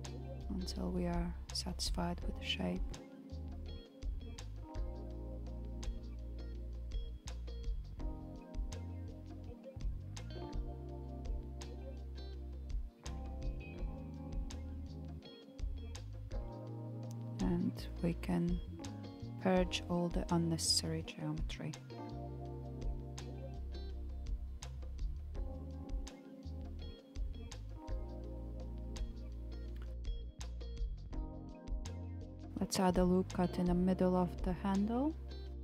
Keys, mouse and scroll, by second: 5.5-6.3 middle drag, 6.3 click, 7.4 KP_1, 9.1 g, 14.2-15.6 middle drag, 15.6 click, 16.7 KP_1, 19.5 alt+click, 21.8 g, 25.0 a, 25.4 m, 29.3-30.9 shift+middle drag, 30.9 click, 32.2 KP_1, 32.5 ctrl+r.